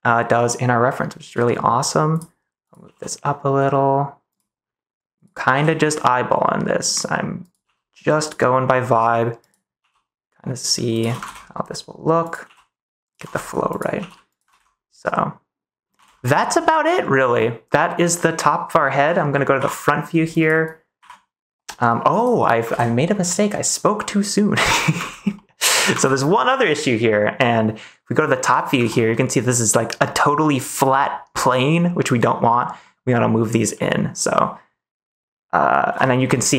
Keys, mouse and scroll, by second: 2.1 click, 2.6 click, 2.8 g, 4.2 click, 5.1 click, 5.4 g, 6.8 click, 7.3 click, 7.6 g, 8.1 click, 9.7 g, 10.9 click, 11.2 ctrl+s, 12.4 g, 13.2 ctrl+s, 13.9 g, 14.2 click, 14.4 ctrl+s, 14.9 middle click, 15.9 ctrl+s, 16.2 click, 16.4 middle click, 17.3 middle click, 18.1 middle click, 19.5 KP_1, 22.7 ctrl+s, 23.9 middle click, 25.0 ctrl+s, 25.3 middle click, 25.9 ctrl+s, 27.3 middle click, 28.4 middle click, 28.8 ctrl+s, 29.0 middle click, 32.1 middle click, 32.8 middle click, 33.7 middle click, 35.8 KP_1.